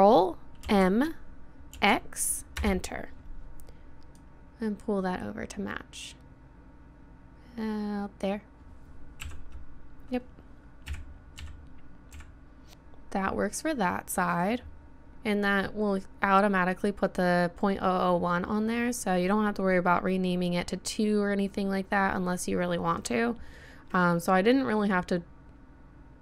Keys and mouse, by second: 0.7 ctrl+m, 9.2 KP_7, 10.9 KP_1, 11.4 KP_3, 12.1 KP_1, 13.9 middle click.